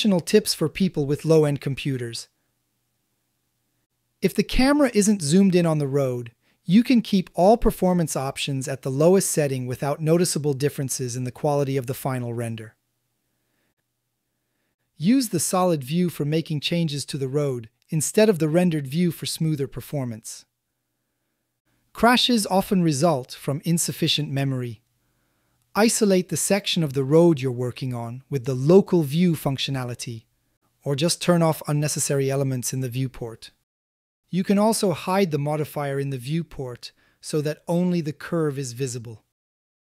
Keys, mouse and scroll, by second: 8.0-9.9 drag, 11.7 click, 12.2-13.1 drag, 14.4 z, 19.1 ctrl+alt+z, 21.0 click, 27.2 middle drag, 27.9 ctrl+alt+z, 28.5 z, 30.0 click, 30.5 shift+middle drag, 31.1-32.1 middle drag, 32.4-32.8 shift+middle drag, 33.6 middle click, 35.0 click, 36.6 click, 37.0 click, 37.7 Tab, 38.3 click, 38.5 g, 38.7 shift+z.